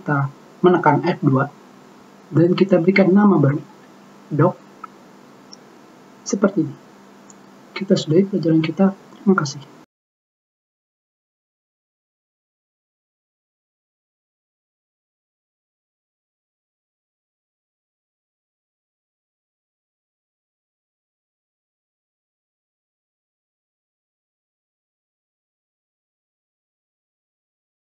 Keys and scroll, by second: 1.8 F2, 2.0 BackSpace, 4.1 d, 4.4 o, 4.9 c, 5.6 Return.